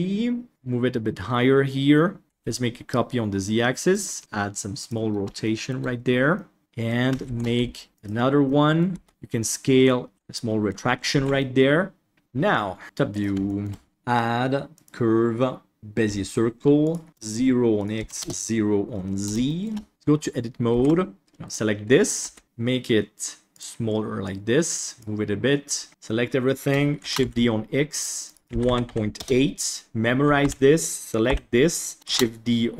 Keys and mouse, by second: 0.5-2.2 drag, 2.2 shift+d, 4.2 g, 5.5 shift+middle click, 6.3 middle click, 6.6 Tab, 7.3 shift+d, 8.5 middle drag, 8.9 Tab, 9.1 s, 10.1 Tab, 10.1 alt+a, 10.3-10.6 middle drag, 11.1 ctrl+s, 11.4-12.5 middle drag, 12.8 KP_7, 13.1 click, 13.4 shift+middle click, 13.9-15.8 drag, 16.9 click, 17.9 click, 19.9 Tab, 20.7 ctrl+s, 21.2 Delete, 21.4 click, 22.2 s, 24.3 click, 25.9 a, 27.0 shift+d, 28.4 click, 30.4 alt+a, 31.2 l, 32.0 shift+d.